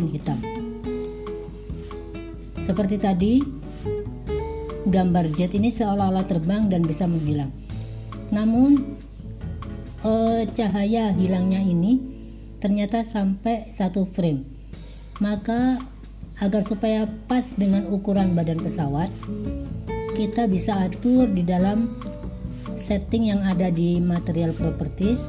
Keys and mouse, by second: 5.3-7.9 drag, 17.5-18.8 drag.